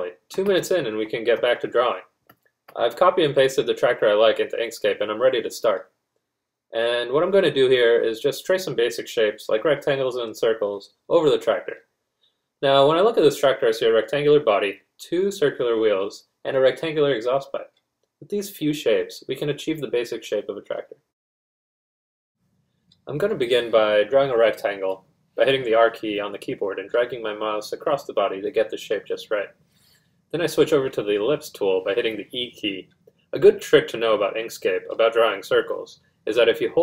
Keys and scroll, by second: 0.7 r.